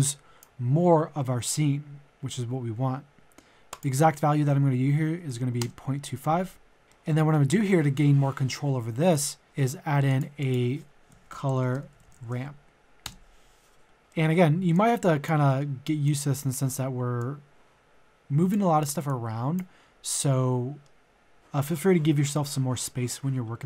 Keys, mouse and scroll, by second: 4.8 KP_Decimal, 5.0 KP_2, 5.3 KP_5, 6.8 middle click, 9.1 click, 9.4 middle click, 10.1 click, 11.1-13.0 typing, 13.0 Return, 14.0 middle click, 14.8 click, 15.4 middle click, 16.0-19.1 drag, 19.2 click, 20.1-23.6 middle drag.